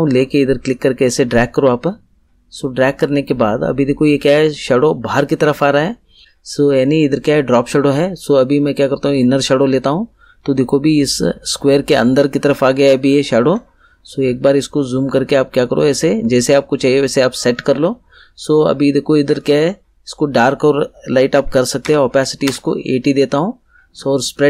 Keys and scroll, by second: 21.4 8, 21.8 0, 22.4 Return.